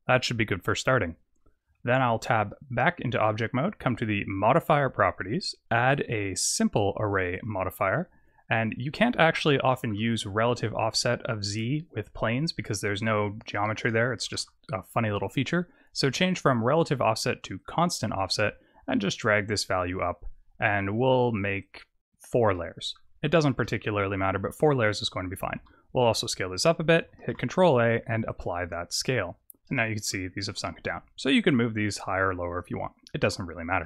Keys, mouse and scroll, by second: 0.0-1.5 scroll down 1, 1.5 Tab, 1.5-2.5 scroll down 1, 4.5 click, 5.7 click, 8.9 middle click, 9.6 shift+middle click, 10.5 click, 13.4 click, 16.4 click, 17.5 click, 18.3 click, 21.0 click, 21.5 click, 22.4 middle click, 23.2 shift+middle click, 23.7-24.2 scroll up 4, 24.2-25.5 scroll down 10, 25.5 s, 27.2 ctrl+a, 29.2-29.7 scroll up 5, 29.7 middle click, 31.3 click, 33.7 Tab.